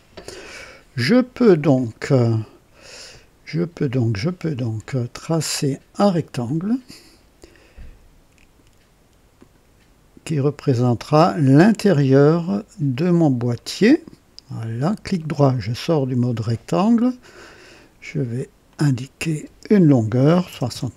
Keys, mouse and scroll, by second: 6.4 click, 9.3 click, 13.5 click, 15.1 right click, 15.9 scroll up 1, 17.1 click, 18.6 click, 20.2 KP_6, 20.4 KP_0, 20.7 Return.